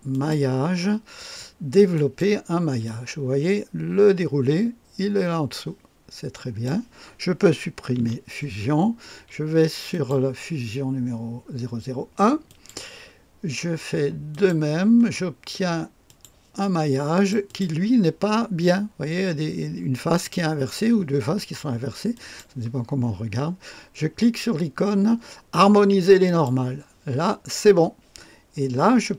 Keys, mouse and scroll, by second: 0.1 click, 1.9 click, 2.8-6.7 drag, 7.9 Delete, 9.9 click, 12.5 click, 14.3 click, 15.2-16.1 scroll down 1, 16.1-17.9 drag, 22.2 click, 26.2 click.